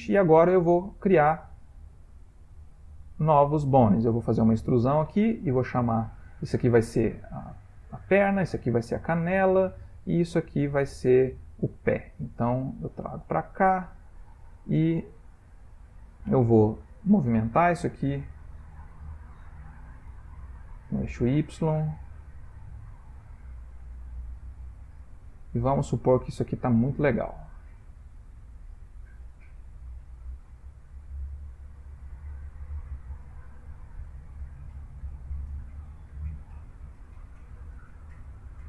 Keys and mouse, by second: 0.5 middle click, 0.6 middle click, 3.3 middle click, 4.2 e, 7.2 middle click, 8.1 e, 9.6-11.5 middle click, 12.2 e, 13.8 middle click, 14.2 middle click, 14.3 middle click, 14.4 middle click, 14.6 shift+middle click, 15.4 middle click, 15.7 middle click, 16.0 middle click, 16.2-17.0 shift+middle click, 16.6 middle click, 16.7 shift+middle click, 16.8 middle click, 20.1 g, 21.6 click, 21.8 g, 23.7 click, 23.7 g, 25.2 middle click, 27.4 click, 27.7 middle click, 29.9 g, 31.7 middle click, 33.2 g, 34.5 click, 34.8-35.5 middle click, 35.4 middle click, 36.2 click, 36.5 g, 37.5 middle click.